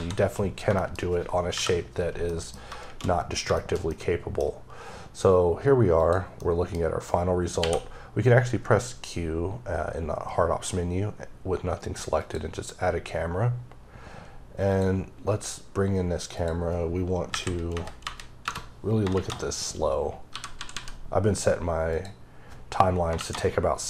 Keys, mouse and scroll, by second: 0.7 shift+middle click, 0.8-1.4 shift+scroll down 2, 1.4 KP_5, 2.2 middle click, 3.2 scroll down 2, 3.5 shift+middle click, 5.9 click, 6.3 middle click, 6.8 scroll down 1, 7.5 q, 12.1 click, 13.1 scroll up 1, 14.6 click, 17.2 KP_6, 18.3 KP_Enter, 19.0 shift+Left, 21.8 click, 23.1 Left.